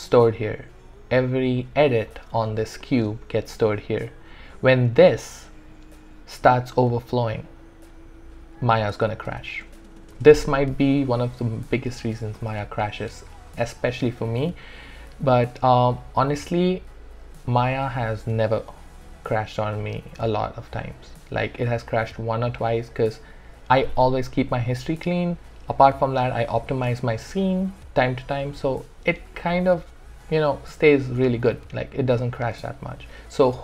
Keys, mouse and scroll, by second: 15.1 typing, 15.2-20.6 alt+drag.